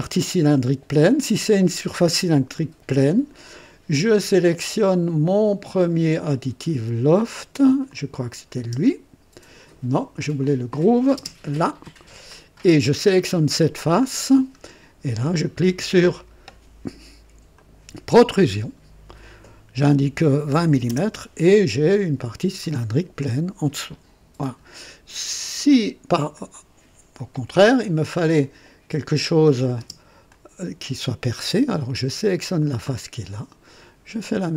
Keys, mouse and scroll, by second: 7.8 click, 8.5 space, 10.4 click, 11.2 space, 12.2 click, 13.1 click, 13.8 scroll down 1, 14.3 scroll up 1, 17.5 click, 20.6 KP_2, 21.1 KP_0, 21.9 click, 22.6-24.7 drag, 25.6 click, 26.3-27.4 drag, 27.2 typing, 27.9-28.2 scroll down 1, 29.3 click, 29.8 space, 30.3-31.1 drag, 31.3 click, 32.5 click, 34.2 click.